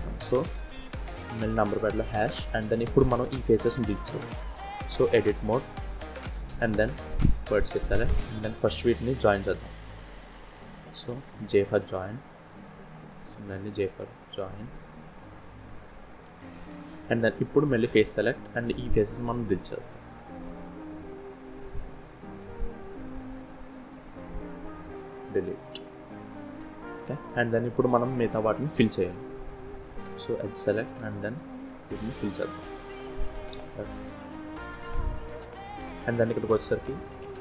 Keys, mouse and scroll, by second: 2.2 middle click, 3.5-3.8 scroll up 2, 4.4 scroll down 1, 4.7 Tab, 5.3 middle click, 7.1 click, 8.0 click, 9.2 click, 11.3 j, 12.4 click, 15.0 shift+click, 15.9 j, 16.4 middle click, 17.4 3, 18.1 click.